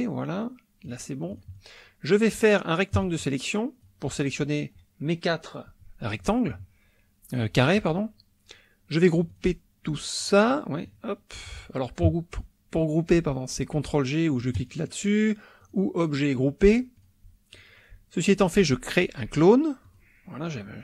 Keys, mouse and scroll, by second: 1.4-2.6 drag, 2.9-4.1 drag, 9.3 click, 10.2 click, 10.9 click, 14.6 click, 15.6 click, 17.0 click, 17.5 click, 19.8 click, 20.6 click.